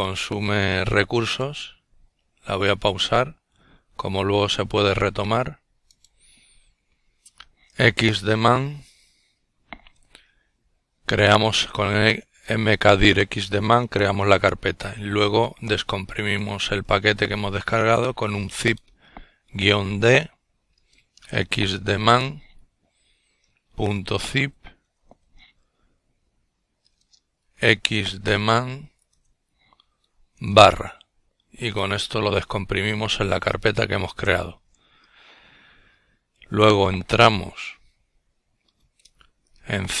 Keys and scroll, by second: 11.9-14.2 typing, 15.5-16.2 typing, 17.7-19.3 typing, 20.4-22.3 typing, 24.0-27.0 typing, 35.2-40.0 typing.